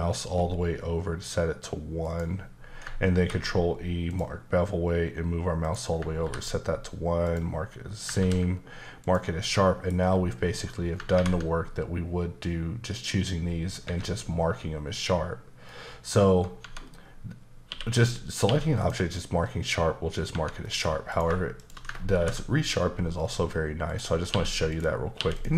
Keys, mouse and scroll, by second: 2.0 click, 3.1 ctrl+e, 4.1 click, 5.6 click, 6.2 ctrl+e, 7.2 click, 8.2 ctrl+e, 9.0 click, 9.5 middle click, 13.8 Escape, 15.7 middle click, 16.6 Tab, 17.7-18.4 typing, 18.8 click, 20.3 Tab, 20.6 middle click, 21.1 click, 21.6 shift+click, 22.2 ctrl+b, 22.7-23.9 scroll up 4, 23.9 click, 24.3 q, 24.7 click, 25.2 q, 25.3 click.